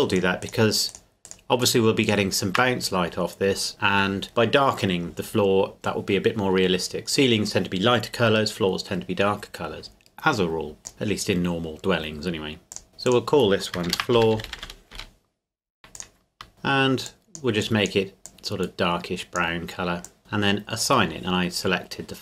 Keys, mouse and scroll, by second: 0.1 shift+right click, 10.8 click, 12.7 click, 13.9-14.6 typing, 14.9 Return, 15.9 click, 16.5 click.